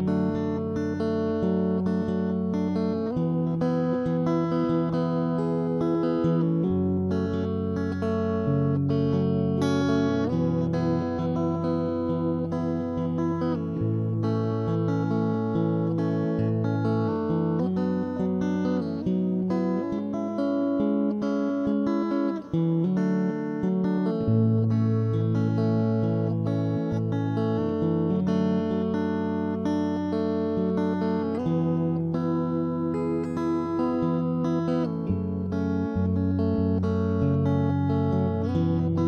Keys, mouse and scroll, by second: 0.0-1.0 middle drag, 0.8 ctrl+Tab, 1.2 middle click, 1.6 ctrl+s, 2.2 middle click, 2.3 right click, 2.6 click, 2.7 middle click, 3.6 middle click, 4.3 g, 4.7-5.9 middle drag, 5.7 x, 6.2 middle click, 6.4 right click, 6.7 middle click, 7.0 click, 7.6 click, 9.0 middle click, 9.8 click, 10.4 click, 10.5 middle click, 11.1 g, 11.4-12.4 middle drag, 13.9 middle click, 14.5 middle click, 14.9 x, 15.2 middle click, 16.0 d, 16.1 click, 16.1 d, 19.1-20.2 middle drag, 20.1 Escape, 20.4-20.8 ctrl+z, 21.0-22.2 middle drag, 21.5 right click, 22.2 Tab, 22.6 shift+h, 22.7 Tab, 22.8 middle click, 23.7 shift+s, 24.1 middle click, 24.4 right click, 24.6 shift+d, 24.9 right click, 25.1 x, 25.3 right click, 25.3 click, 25.6 middle click, 25.8 ctrl+KP_3, 25.9 middle click, 27.0 alt+r, 27.4 click, 28.2 click, 29.3-30.4 middle drag, 30.5 middle click, 30.8 ctrl+KP_3, 30.9-32.0 middle drag, 32.2 middle click, 32.6 d, 32.7 click, 33.3 middle click, 34.3 middle click, 34.9 middle click, 35.8 ctrl+KP_3, 36.0 middle click, 37.0 middle click, 37.7 right click, 38.2-39.0 typing, 38.5 middle click, 38.5 right click.